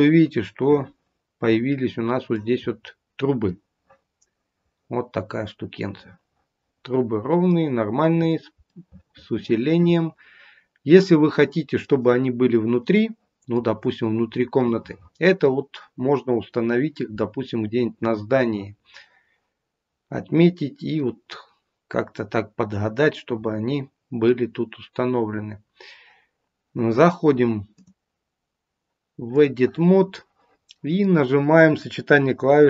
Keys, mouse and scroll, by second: 2.6-3.3 scroll up 1, 3.3 middle click, 3.3-5.3 scroll up 2, 7.8-8.8 scroll down 3, 8.6 middle click, 8.8 middle click, 12.8 middle click, 14.5 middle click, 17.6-20.4 scroll up 1, 20.4-21.0 scroll down 2, 21.0 middle click, 27.6 click, 30.1 middle click.